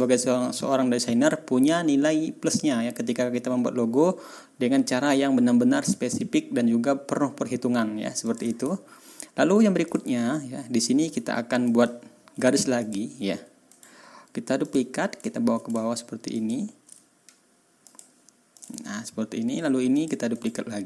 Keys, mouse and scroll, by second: 3.0 ctrl+scroll down 2, 3.8-4.1 ctrl+scroll up 2, 8.2 click, 9.1-9.4 ctrl+scroll up 2, 9.8 ctrl+click, 10.1-10.4 ctrl+scroll down 2, 10.7-11.0 ctrl+scroll up 2, 11.9 ctrl+scroll down 2, 12.8 click, 13.7 right click, 14.6 click, 15.2 ctrl+scroll up 2, 16.3 shift+click, 17.8 click, 18.5 ctrl+click, 18.9 ctrl+scroll down 1, 19.2 ctrl+scroll up 1, 19.9 click, 20.3 right click.